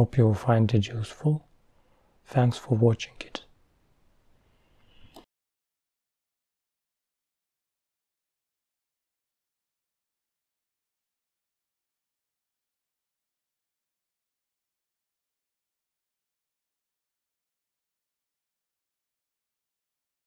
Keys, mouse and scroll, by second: 2.1-5.0 drag, 5.4-5.8 scroll up 5, 7.6-10.4 drag, 10.4 KP_0, 12.8-13.3 scroll down 4, 13.8-14.4 scroll down 4, 15.6-16.8 drag, 16.8-18.8 middle drag.